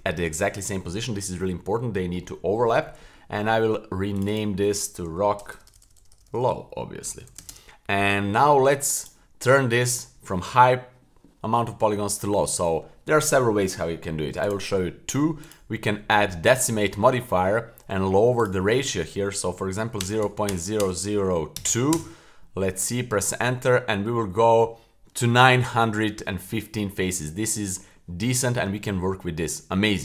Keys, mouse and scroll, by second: 4.1 click, 4.3-5.7 drag, 5.5-6.4 typing, 6.1-7.5 drag, 9.0 click, 14.4 click, 16.5 click, 18.4-23.9 drag, 20.8 KP_0, 27.1-27.8 middle drag, 27.9-28.6 middle drag.